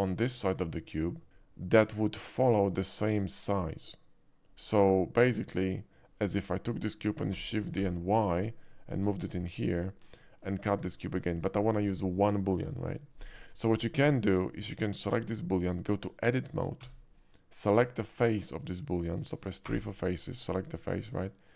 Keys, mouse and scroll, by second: 5.5 click, 7.3 shift+d, 7.8 y, 9.5 click, 11.4 click, 11.4 x, 14.9 click, 16.9 Tab, 19.7 3, 20.4 click.